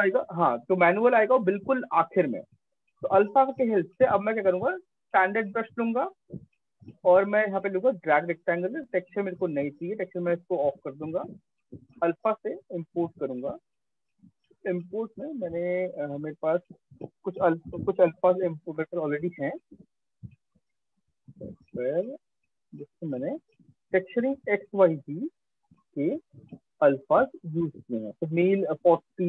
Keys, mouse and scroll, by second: 3.9 click, 5.1 click, 6.2 click, 7.3 click, 9.4 click, 10.1 click, 11.2 click, 12.3 click, 15.7 click, 18.4 click, 20.6 click, 20.8 click, 21.6-23.3 scroll, 24.3 click, 24.4 click, 25.7 click, 26.2 click, 28.7 click, 28.9 click.